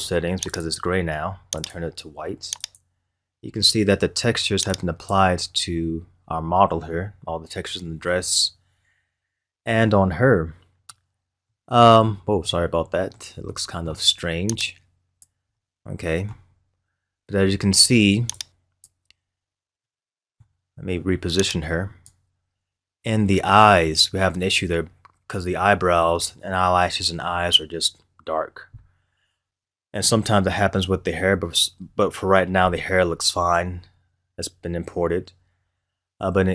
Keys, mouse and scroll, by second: 0.5 click, 1.5 click, 4.7-5.5 drag, 5.5-6.3 scroll up 5, 6.3-7.6 scroll down 2, 7.6-8.5 scroll up 1, 8.7 scroll down 1, 9.5 scroll down 1, 10.8-12.1 middle drag, 12.1-12.5 scroll up 2, 12.5-14.6 middle drag, 14.6 click, 15.5-16.6 middle drag, 16.6-17.0 scroll up 2, 18.3-19.2 drag, 19.2 scroll up 2, 19.8-21.4 middle drag, 21.4 click, 22.3-22.9 scroll up 3, 23.2 scroll down 1, 30.5 scroll down 1, 34.1-35.0 scroll up 1, 35.0-35.8 scroll down 1, 35.8-36.4 scroll up 1.